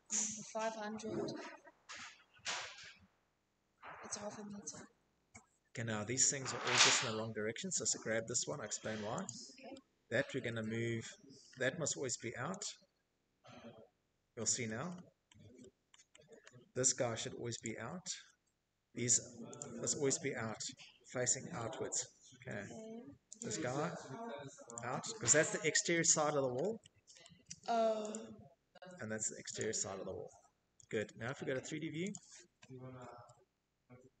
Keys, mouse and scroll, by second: 2.0 Escape, 2.2 Escape, 2.4 Escape, 3.1 middle click, 3.3 middle click, 3.7 Escape, 5.2 click, 5.2 middle click, 5.2 middle click, 5.6 middle click, 6.2 middle click, 6.2 Escape, 6.5 Escape, 7.5 scroll, 8.3-10.6 middle click, 8.6 scroll, 9.5-9.8 scroll, 10.6 click, 12.0 Escape, 12.7 middle click, 13.0 middle click, 13.3 middle click, 13.6 middle click, 14.2 middle click, 14.4 middle click, 14.6 middle click, 15.7 click, 16.2 middle click, 16.2 middle click, 16.4 middle click, 17.6 click, 18.9 middle click, 18.9 middle click, 19.0 Escape, 19.0 middle click, 19.4 scroll, 20.0-20.6 scroll, 20.6 Escape, 21.4 click, 21.5 middle click, 22.7 click, 24.3 middle click, 24.9 middle click, 25.2 middle click, 25.5 Escape, 25.7 Escape, 26.1 click, 27.6 click, 28.6 Escape, 30.1 click, 31.0-31.6 middle click, 31.2 middle click, 33.5-34.2 scroll.